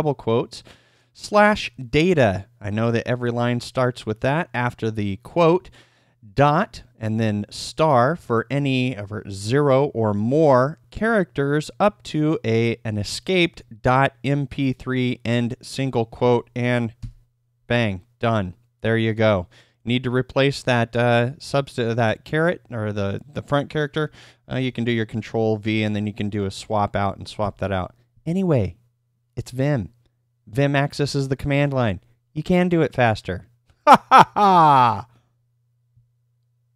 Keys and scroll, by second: 27.4 Escape, 27.4 typing.